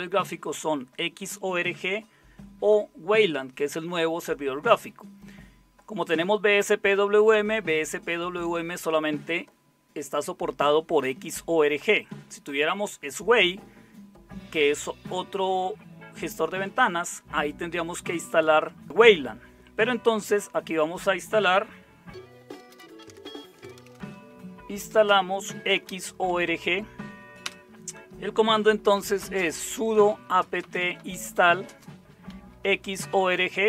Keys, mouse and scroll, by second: 22.3-26.7 typing, 27.4 Return, 28.6-33.6 typing.